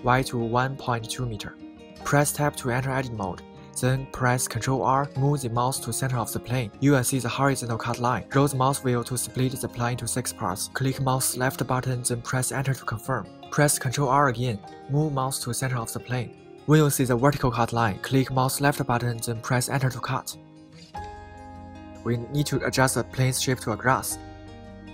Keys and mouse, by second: 3.4 Tab, 5.6 ctrl+r, 11.4 click, 13.7 ctrl+r, 16.6 right click, 18.5 Return, 20.3 a, 20.7 a.